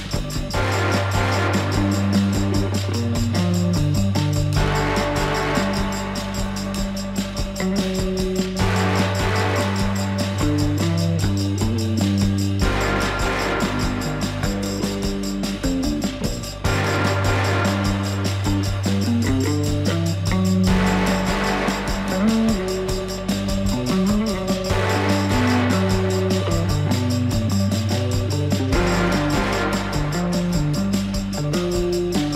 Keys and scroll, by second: 3.6 ctrl+x, 9.6 ctrl+a, 16.6 ctrl+z, 20.2 ctrl+a.